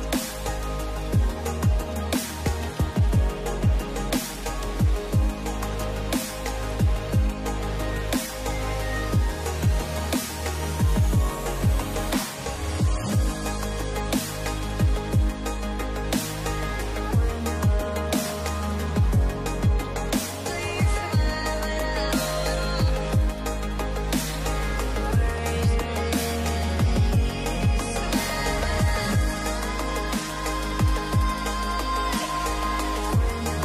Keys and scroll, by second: 1.9 space, 3.8 space, 7.4 space, 8.7 space, 16.2 space, 22.6 space, 31.6 space.